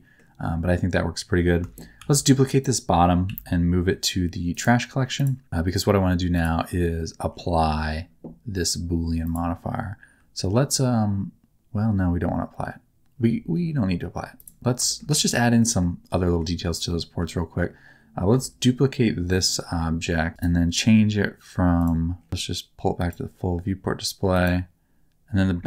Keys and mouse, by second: 2.3 shift+d, 3.2 m, 6.3 click, 9.2 click, 14.9 shift+middle click, 15.1 middle click, 15.6 middle click, 16.2 middle click, 17.0 middle click, 20.3-21.8 middle drag, 20.3 shift+d, 21.8 click, 22.3 click, 24.3 click.